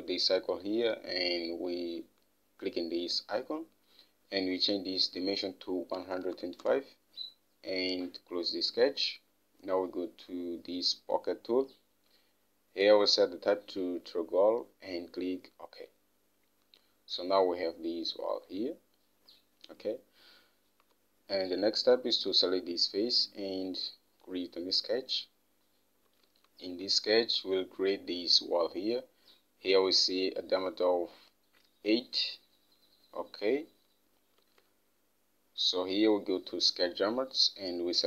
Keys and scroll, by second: 6.2-7.3 typing, 21.2 Home, 26.7 alt+Tab, 34.8 alt+Tab.